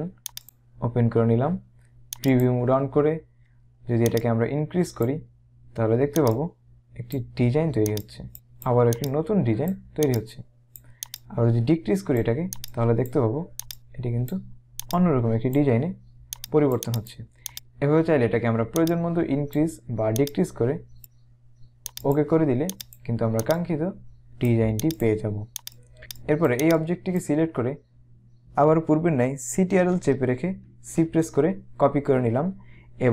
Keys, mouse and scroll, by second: 0.5 click, 2.2 click, 4.1 click, 6.3 click, 9.0 click, 18.9 click, 22.0 click, 26.1 click, 30.7 ctrl+c.